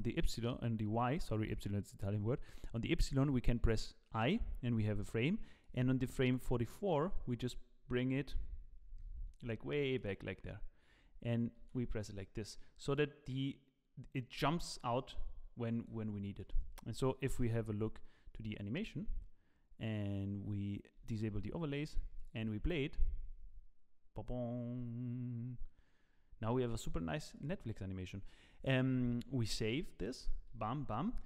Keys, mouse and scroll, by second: 5.6 click, 6.9 middle click, 7.3-7.8 scroll down 1, 7.8-8.7 scroll down 10, 8.7 scroll down 5, 8.9 g, 11.6 i, 13.2 click, 16.4 click, 17.4 KP_0, 18.3 z, 21.0 z, 22.2 click, 26.6 click, 27.3 click, 29.6 ctrl+s, 30.5 z.